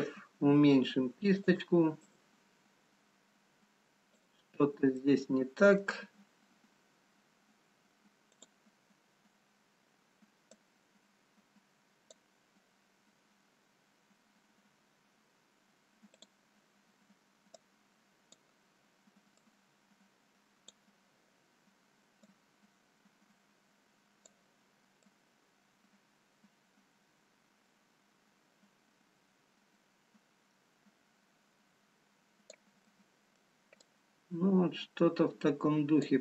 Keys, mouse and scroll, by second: 0.5 f, 2.3 click, 5.1 middle click, 5.1-5.5 scroll down 1, 10.1 click, 11.2 click, 16.3 click, 17.6 click, 33.0 middle click, 35.0 click.